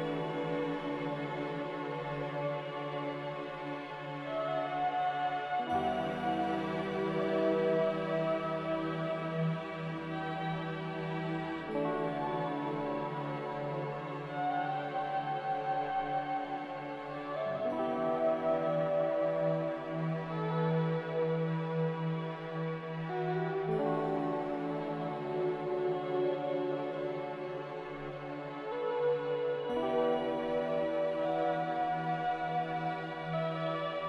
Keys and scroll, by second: 4.4 z, 7.1 a, 10.1 z, 12.9 a, 15.1 m, 17.4-18.4 typing, 21.1 b, 23.0 a, 30.9 ctrl+j.